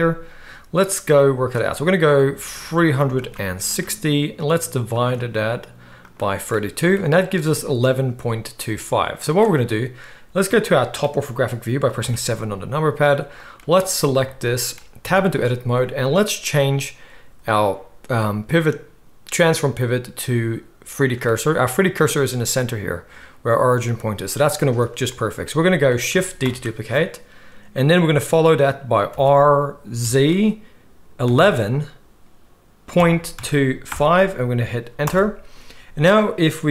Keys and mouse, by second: 12.0 KP_7, 13.5-16.5 middle drag, 15.0 Tab, 16.5-36.7 drag, 26.4 shift+d.